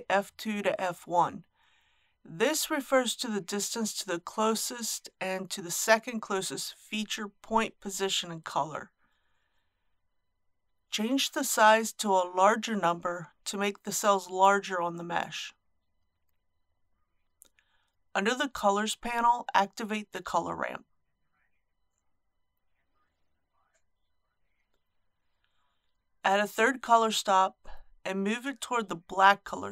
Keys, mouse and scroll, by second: 13.1 KP_1, 13.2 KP_Decimal, 13.4 KP_5, 17.8-18.3 scroll down 1, 19.0 click, 19.6-20.0 scroll down 1, 22.3 click, 22.9-23.3 scroll down 1, 24.2 click, 24.8-25.3 scroll down 1.